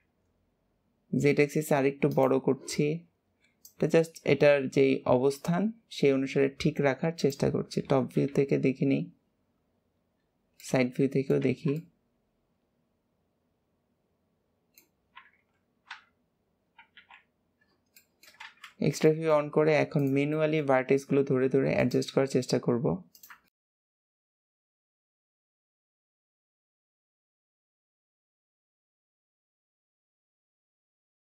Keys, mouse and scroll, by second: 3.6 click, 8.2 KP_7, 10.6 middle click, 11.4 alt+z, 11.7-14.7 middle drag, 17.9 shift+middle click, 18.4 alt+z, 18.6-19.0 scroll up 3, 19.0 shift+middle click, 19.9 click, 20.3 shift+middle click, 21.1 g, 23.4 shift+middle click, 23.7 click, 24.1 shift+middle click, 24.2 click, 24.9 shift+middle click, 25.1 click, 25.5 shift+middle click, 25.7 click, 26.1 shift+middle click, 26.3 click, 26.7 shift+middle click, 27.0 click, 27.4 shift+middle click, 27.6 click, 28.3 shift+middle click, 28.5 click, 29.3 shift+middle click, 29.6 click, 30.6 shift+middle click, 30.9 click.